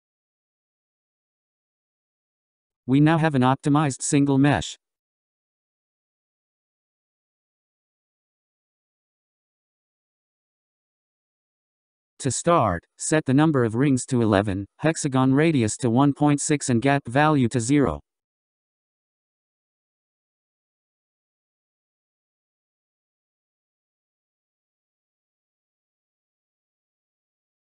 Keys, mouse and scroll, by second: 0.8 click, 1.2 middle click, 9.8-13.1 drag, 13.1 middle click, 13.1-14.1 scroll down 11, 16.1-17.4 scroll up 3, 17.4-18.5 scroll up 1, 18.5-19.3 scroll up 9, 19.9-22.7 drag, 22.7 1, 24.4-27.2 drag.